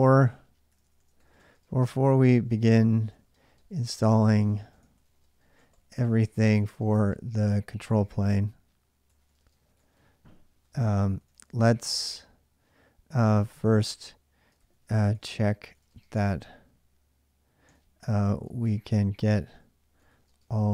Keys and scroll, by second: 0.0-20.7 typing.